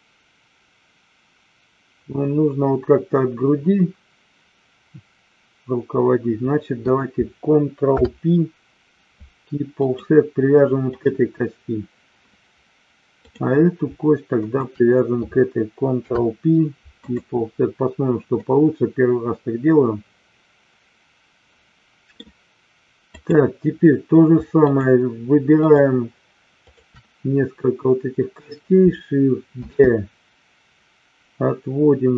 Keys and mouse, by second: 7.8 ctrl+p, 10.8 click, 13.1 click, 14.3 shift+click, 15.9 ctrl+p, 18.3-22.1 middle drag, 23.2 click, 26.7 shift+click, 29.6 shift+d.